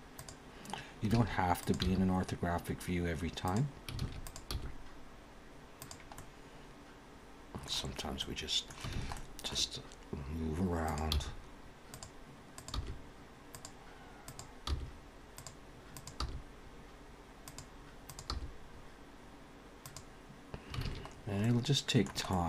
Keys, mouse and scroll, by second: 1.1 alt+a, 1.5 click, 1.9 g, 4.0 alt+a, 4.2 click, 4.5 g, 6.2 middle click, 8.2 middle click, 8.9 alt+a, 9.1 middle click, 10.8 click, 11.1 g, 12.6 click, 12.8 g, 14.3 click, 14.7 g, 16.0 click, 16.2 g, 18.1 click, 18.3 g, 20.8 alt+a, 21.1-21.4 scroll down 3, 21.4 middle click, 22.2 middle click.